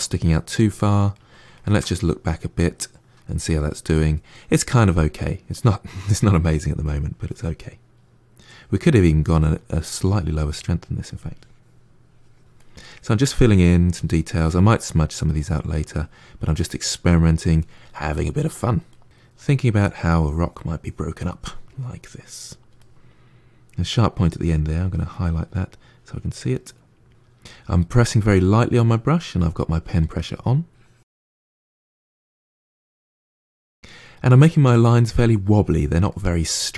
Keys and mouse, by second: 6.5 click, 7.5 middle click, 8.2-9.4 drag, 9.4-10.8 middle drag, 10.8-12.4 drag, 12.4 middle click, 13.1 click, 14.0 middle click, 14.7 click, 15.3 middle click, 15.8-16.8 drag, 16.8 middle click, 17.2 click, 17.8 middle click, 18.3 click, 18.8 middle click, 19.1 click, 19.4 middle click, 19.6 click, 20.0 middle click, 20.2 click, 20.3 middle click, 20.5-21.8 drag, 21.8 middle click, 22.0 click, 22.2 middle click, 22.4 click, 22.8 middle click, 23.0 click, 23.1-24.2 middle drag, 24.2 click, 24.3 middle click, 24.6 click, 24.9 middle click, 25.1-26.2 drag, 26.2 middle click, 26.4-28.1 drag, 28.1 middle click, 29.0 click, 29.4 middle click, 29.6 click, 29.8 middle click, 30.1 click, 30.3 middle click, 30.5 click, 31.2 middle click, 31.4 click, 31.6 middle click, 31.9 click, 32.3 middle click, 33.0 click, 33.8 middle click, 34.7-36.0 drag, 36.0-36.7 middle drag.